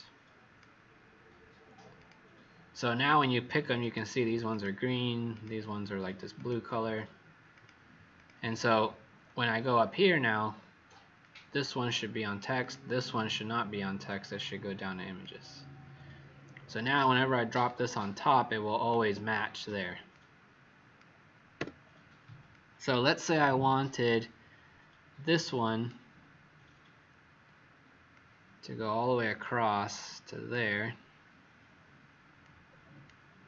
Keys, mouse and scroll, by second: 8.1 click, 9.7-11.1 scroll up 9, 11.1 click, 12.6 click, 17.6 shift+click, 21.5 w, 22.4 click.